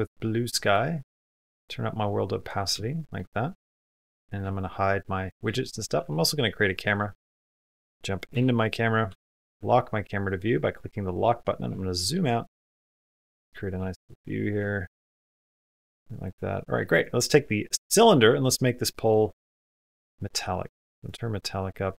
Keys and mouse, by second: 2.7 shift+middle click, 3.7 click, 4.0 shift+middle click, 5.0 middle click, 5.8 shift+a, 8.1 KP_0, 8.9 q, 10.0 click, 11.6 shift+middle click, 12.1 middle click, 12.5 shift+middle click, 13.4 middle click, 13.7 shift+middle click, 14.0 middle click, 14.5 shift+middle click, 14.8 middle click, 16.7 click, 18.9 click, 19.6 click, 20.5 click.